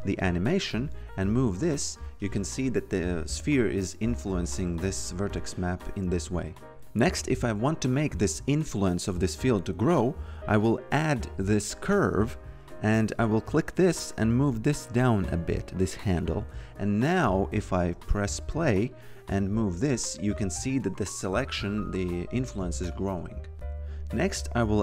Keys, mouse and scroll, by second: 7.9 click, 10.6 click, 13.4 click, 17.2 click, 17.9-18.8 typing, 18.7 click, 23.5 click, 24.3-24.8 typing.